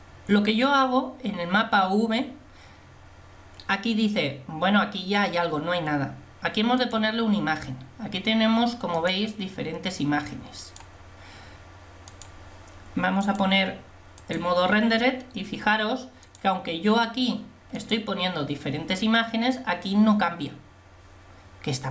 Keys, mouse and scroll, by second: 14.5 click.